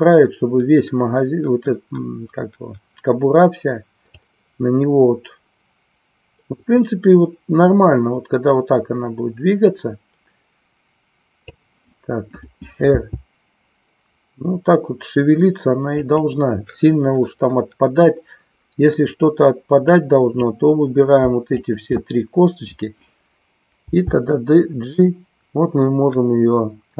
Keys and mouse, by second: 4.2-11.7 drag, 16.1 click, 19.8 click, 21.5-22.7 shift+drag.